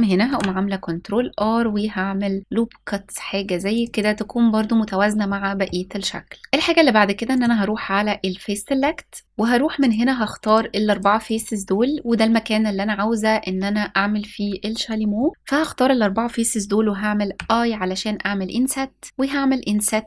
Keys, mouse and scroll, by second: 3.5 click, 4.9 middle click, 7.0 click, 9.4 click, 10.1 shift+click, 10.5 shift+click, 10.9 shift+click, 14.8 middle click, 15.3-17.0 scroll up 2, 17.0 i, 19.0 s.